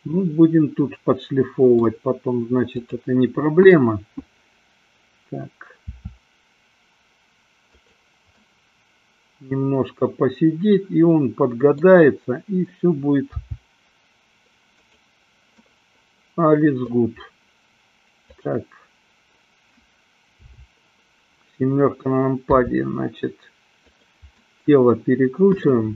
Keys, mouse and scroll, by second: 3.1-4.1 drag, 6.1 r, 8.1 click, 8.6-12.1 middle drag, 13.3 g, 15.9-17.2 middle drag, 18.4-19.7 drag, 20.7 KP_7, 22.4 r, 24.4 drag, 24.6-25.6 middle drag, 25.7 middle click.